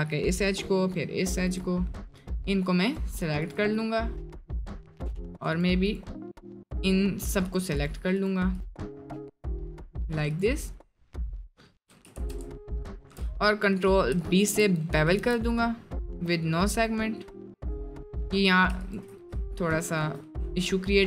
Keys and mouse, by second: 2.3 shift+click, 2.8 shift+click, 4.3 middle click, 5.2 click, 5.5-6.8 shift+drag, 7.4 shift+click, 8.8 shift+click, 9.0-10.3 shift+drag, 11.4 shift+click, 12.2 ctrl+z, 13.5 middle click, 18.7 ctrl+click, 19.8 ctrl+click, 20.3 middle click, 20.8 middle click.